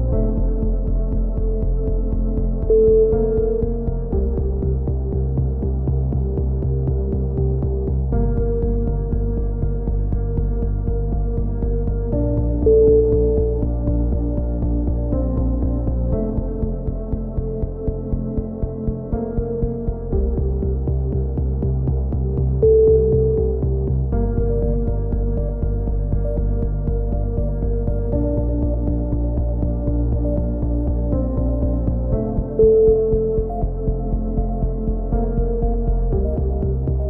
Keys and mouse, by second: 0.3 right click, 0.5 click, 1.2 a, 1.4 z, 1.6-3.1 drag, 3.5 right click, 4.0 e, 4.4 click, 6.0 KP_7, 6.1 z, 6.3 click, 6.8-9.7 drag, 9.7 e, 10.1-12.5 drag, 11.2 c, 11.4 right click, 14.6 right click, 14.8 click, 15.8 a, 16.3 right click, 16.5 click, 17.1 a, 17.8 z, 17.9 z, 18.3 click, 22.3 ctrl+r, 24.1 a, 25.4 ctrl+r, 26.5-27.7 right drag, 26.9 g, 29.3-30.5 right drag, 29.7 g, 32.5 a, 34.9 ctrl+r, 36.1 a, 36.3 z, 36.4 click.